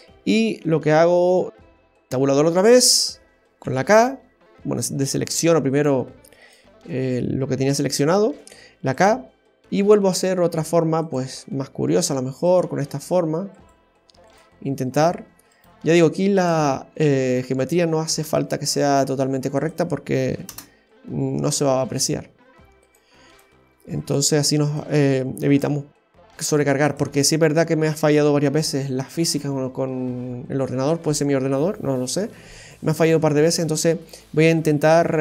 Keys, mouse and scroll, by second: 1.9 Tab, 6.4 right click, 22.8 right click, 23.3 shift+right click, 24.0 shift+right click, 24.6 shift+right click, 25.5 shift+right click, 26.3 shift+right click, 27.5 shift+right click.